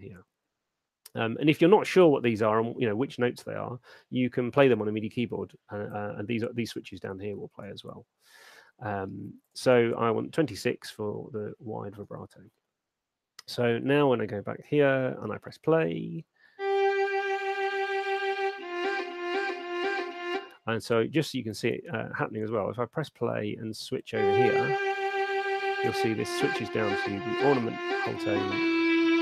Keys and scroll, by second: 16.0 alt+shift+space, 20.4 space, 23.1 alt+shift+space.